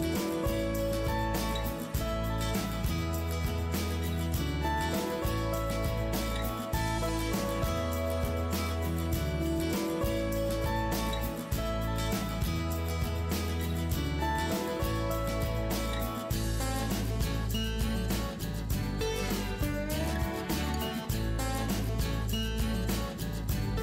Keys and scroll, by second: 0.1 ctrl+alt+shift+i, 0.3 ctrl+alt+shift+Delete, 1.8 ctrl+t, 2.6 Delete, 4.3 ctrl+shift+Return, 9.2 Return, 12.2 Return, 16.7 Return.